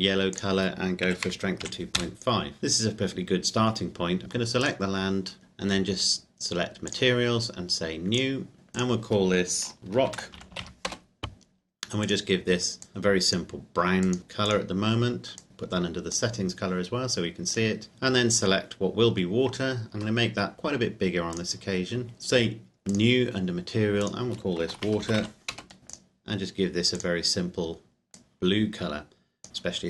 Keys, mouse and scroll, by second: 1.1 KP_2, 1.3 KP_Decimal, 1.9 KP_5, 2.2 KP_Enter, 2.6 ctrl+click, 4.2 click, 4.6 right click, 6.9 click, 10.1-10.6 typing, 10.9 Return, 12.0 click, 17.6 right click, 19.9 s, 21.3 click, 23.0 click, 24.6-25.3 typing, 25.5 Return, 26.1 click.